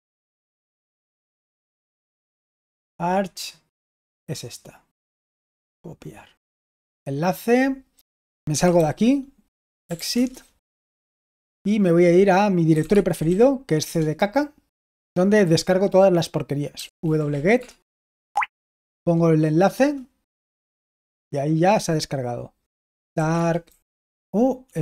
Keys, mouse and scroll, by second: 5.4-6.9 scroll down 1, 6.9 scroll down 1, 8.2-11.2 typing, 12.5-13.7 typing, 13.7 Return, 16.4-17.7 typing, 18.3 ctrl+alt+v, 18.3 ctrl+alt+g, 19.6 Return, 22.7-24.5 typing.